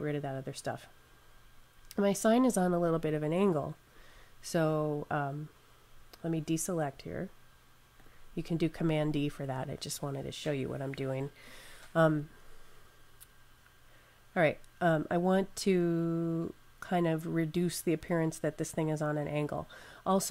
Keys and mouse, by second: 3.7 click, 6.6 click.